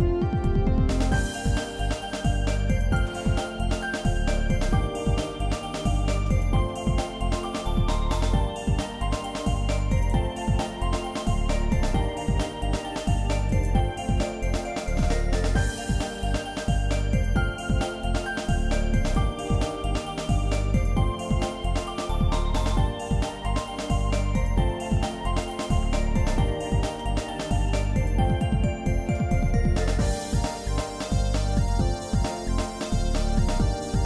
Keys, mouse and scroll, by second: 0.4-0.9 scroll up 2, 1.3-3.2 drag, 3.3-3.6 scroll down 2, 3.3 scroll up 1, 3.9-5.1 shift+middle drag, 5.3 shift+middle click, 6.4 middle click, 7.0 shift+middle click, 7.5 middle click, 8.0-8.4 scroll up 3, 9.1 shift+middle click, 9.1 click, 10.0 shift+click, 11.8 g, 14.1 shift+middle click, 15.2-19.6 drag, 19.6 ctrl+z, 19.7 middle click, 20.1-20.8 scroll up 4, 21.2-21.5 scroll down 2, 21.8-25.8 drag, 25.9 shift+middle click, 26.6-27.4 shift+scroll down 4, 27.8 scroll down 1, 27.9-29.1 shift+middle drag, 29.3 middle click, 29.8 shift+middle click, 30.5 middle click, 31.1 shift+middle click, 32.2 shift+middle click, 33.4 middle click.